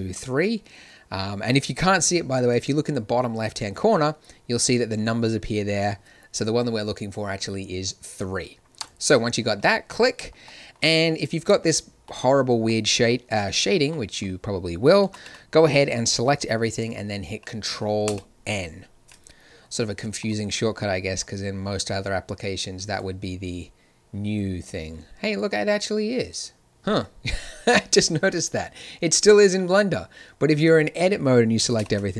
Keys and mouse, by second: 10.6-18.0 drag, 15.0 a, 15.2 a, 18.0 ctrl+n, 20.1 click, 31.7 ctrl+n.